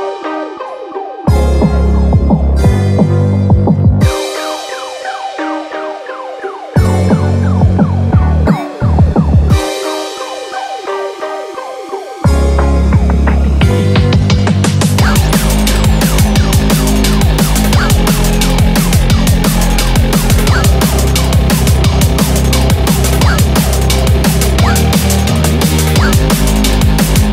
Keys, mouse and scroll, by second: 0.0 middle click, 1.4 click, 2.1 KP_0, 3.1 KP_Enter, 3.8 KP_0, 5.6 KP_Enter, 6.3 KP_0, 7.9 KP_Enter, 8.6 KP_0, 11.3 middle click, 12.5 click, 14.1 scroll down 2, 14.3 middle click, 15.6 scroll up 2, 15.8 middle click, 16.3 scroll down 3, 17.7 click, 18.8 KP_0, 20.6 middle click, 21.2 scroll up 2, 21.5-21.9 scroll down 2, 21.7 middle click, 22.4 scroll up 1, 22.9 scroll down 3, 23.5 scroll down 4, 23.7-24.7 scroll up 19, 24.7 middle click, 25.3 click, 26.4 scroll up 2, 27.1 click.